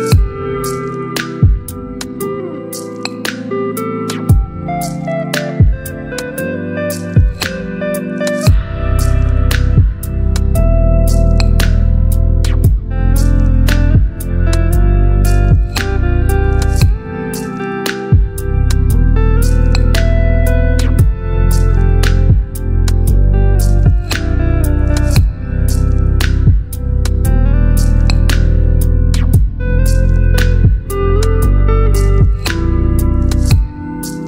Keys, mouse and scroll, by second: 5.2-11.8 alt+drag, 12.3-13.0 alt+shift+drag, 17.5 click, 22.4 right click, 23.2 click, 27.9-29.5 scroll up 1, 29.5 click.